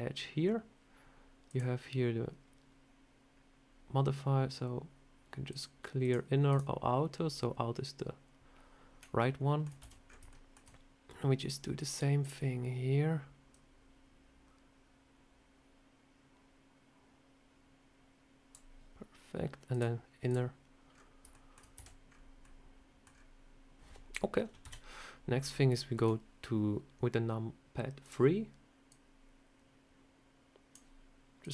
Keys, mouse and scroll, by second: 1.4 click, 3.1 scroll down 1, 5.4 click, 5.9 click, 6.4 click, 9.1 shift+middle click, 9.7 a, 9.9-10.3 scroll up 3, 10.2 shift+middle click, 11.3 click, 19.6 click, 20.2 click, 20.8 scroll down 4, 21.2 shift+middle click, 21.7 a, 22.0 scroll up 3, 22.3 middle click, 23.0 scroll down 2, 24.5 KP_3, 25.3 scroll up 4, 25.7 shift+middle click, 27.9 click, 28.8 click, 31.3 click.